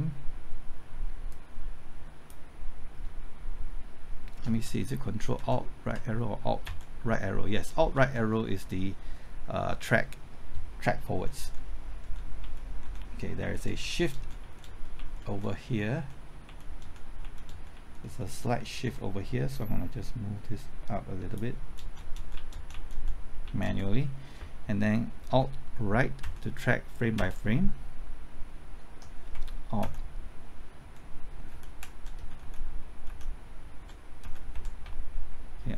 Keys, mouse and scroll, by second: 1.3-2.9 drag, 4.4 typing, 5.3 ctrl+alt+Right, 6.6 alt+Right, 11.3-13.8 typing, 13.6 Right, 13.8 Left, 14.1 Right, 14.3 Left, 14.6 Right, 14.9 Left, 15.2 Right, 15.5 Left, 15.9 Right, 16.4 Left, 16.8 Right, 17.2 Left, 17.4 Right, 17.7 Left, 18.0 Right, 18.4 Left, 18.8 Right, 19.4-21.5 drag, 21.5-22.4 typing, 22.7 Left, 22.8 Right, 23.4 Left, 23.6 Right, 26.2 alt+Right, 27.1 typing, 29.8 alt+Left, 30.8-33.0 typing, 33.8 Right, 34.2 Left, 34.5-35.3 typing.